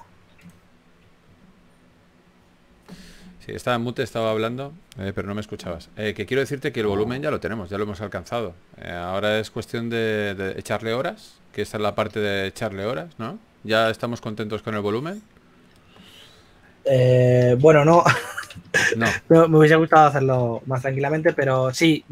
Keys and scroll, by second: 3.6 shift+d, 4.7 d, 7.7 d, 14.3 s, 19.3 typing, 20.7-21.7 typing.